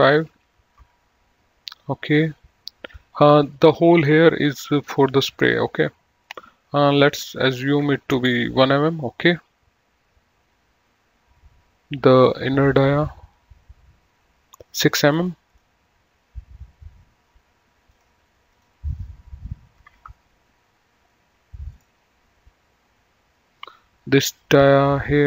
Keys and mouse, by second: 0.5 KP_4, 0.6 KP_5, 1.1 KP_Enter, 3.1 click, 5.2 click, 7.9 KP_1, 8.1 Return, 13.0 click, 15.7 click, 18.0 click, 20.2 KP_6, 20.3 KP_Enter, 22.0 click.